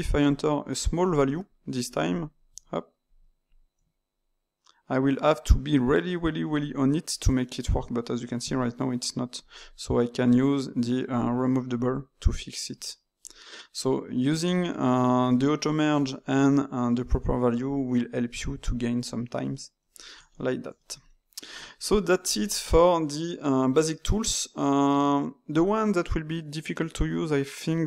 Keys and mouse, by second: 0.2-1.4 drag, 1.4 shift+middle click, 2.1 click, 2.4 e, 3.4 click, 3.7 e, 8.6-11.1 shift+middle drag, 11.1-12.8 drag, 12.8-15.8 ctrl+middle drag, 18.3-24.6 middle drag.